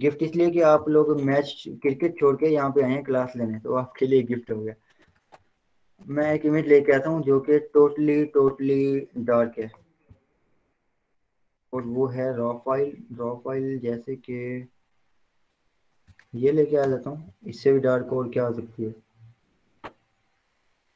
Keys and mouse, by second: 0.3 ctrl+0, 0.6 v, 3.0 click, 5.7 click, 6.4 ctrl+o, 9.7 click, 16.2 click, 17.6 Return.